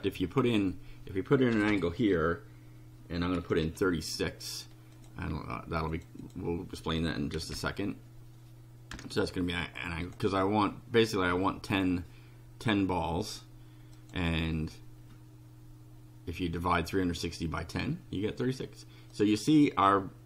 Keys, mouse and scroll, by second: 1.5 BackSpace, 3.4 KP_3, 3.6 KP_6, 5.0 click, 5.9 click, 7.1-8.0 typing, 8.9 Return, 10.0 click, 14.0 click, 19.1-20.2 drag.